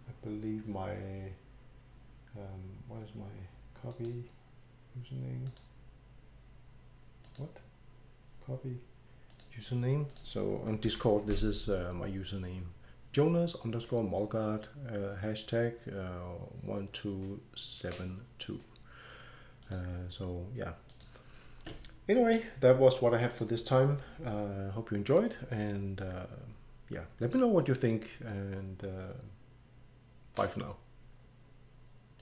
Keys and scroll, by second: 10.9 ctrl+v.